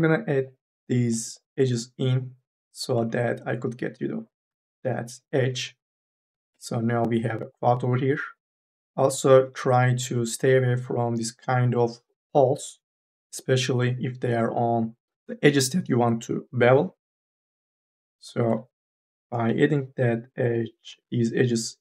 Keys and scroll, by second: 0.0 e, 6.1 3, 6.4 e, 8.8 ctrl+z, 10.3 ctrl+z, 10.9 1, 15.1 2, 17.1 1, 19.2 m, 19.5 e, 21.1 ctrl+z.